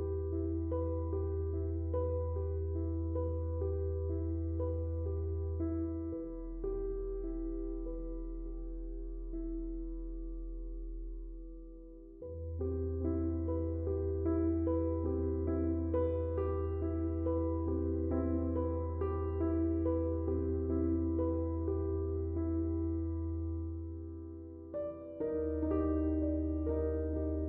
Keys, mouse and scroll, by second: 2.9 typing, 7.0 click, 10.0 click, 15.4 Tab, 18.7 Tab, 22.6 Tab, 23.8 click, 27.1-27.4 drag.